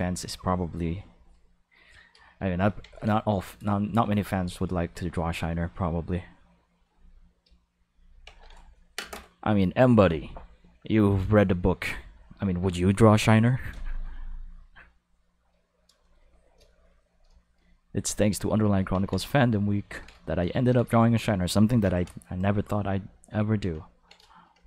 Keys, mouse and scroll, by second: 0.9 r, 1.9 click, 1.9 right click, 2.8 ctrl+s, 5.1 r, 6.8 click, 7.2 g, 7.8 click, 8.2 ctrl+s, 18.9 ctrl+s.